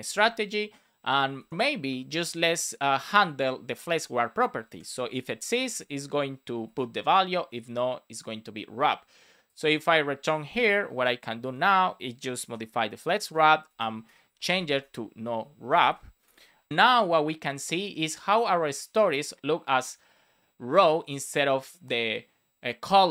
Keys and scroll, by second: 0.0 super+v, 1.3 shift+\, 2.2 BackSpace, 4.6 space, 5.0 shift+\, 5.6 space, 6.6 super+s, 10.9 Left, 11.6 space, 13.0-14.4 typing, 16.2 super+d, 16.3 super+s.